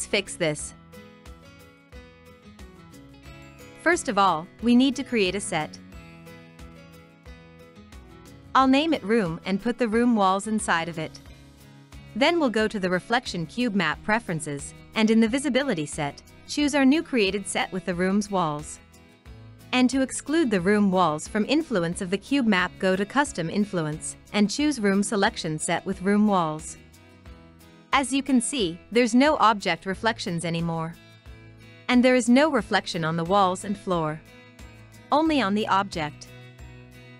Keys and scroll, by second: 8.0-10.6 typing, 13.1-14.5 typing, 35.4 alt+Tab.